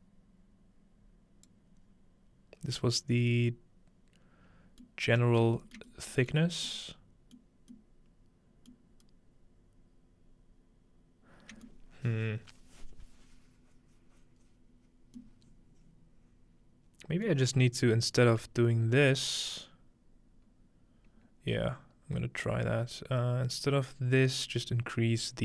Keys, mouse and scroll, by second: 5.0 middle click, 5.5 shift+middle click, 5.8 middle click, 6.3 middle click, 6.7-8.7 scroll up 2, 8.8 middle click, 8.8-10.3 scroll up 2, 10.3-11.7 scroll up 1, 14.7-17.3 scroll down 2, 15.3-17.5 middle drag, 18.2-19.1 drag, 21.1-22.0 scroll down 1, 22.0-22.5 scroll down 1, 22.5-24.4 drag.